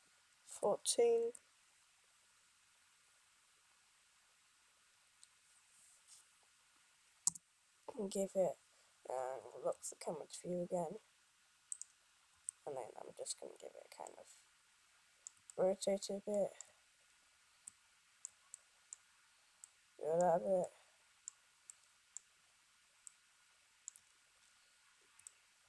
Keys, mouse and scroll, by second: 1.5 click.